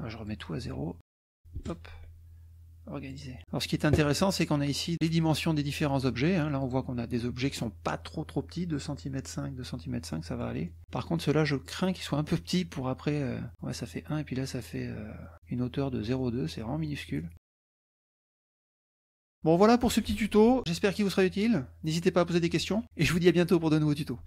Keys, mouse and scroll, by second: 0.3 click, 1.2 KP_0, 1.4 Tab, 1.6 KP_0, 1.9 Tab, 3.1 click, 3.5 middle click, 4.9 click, 6.6 click, 10.1 middle click, 10.7 middle click, 11.7 click, 13.5 click, 16.2 click, 16.2 right click, 16.9 right click, 19.7 click.